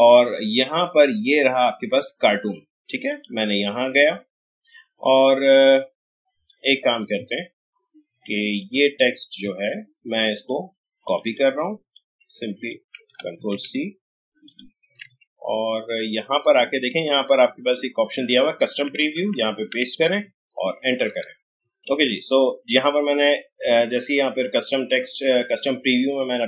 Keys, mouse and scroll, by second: 3.1 click, 4.9 scroll down 1, 8.6-13.4 drag, 13.4 ctrl+c, 14.4 click, 15.0 alt+Tab, 16.4 click, 19.3 click, 19.4 ctrl+v.